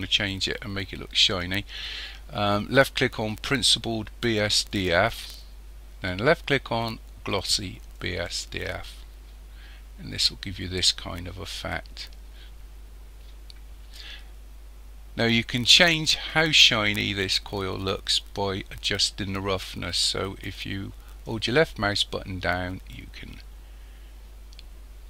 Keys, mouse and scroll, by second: 4.7 click, 21.3 click.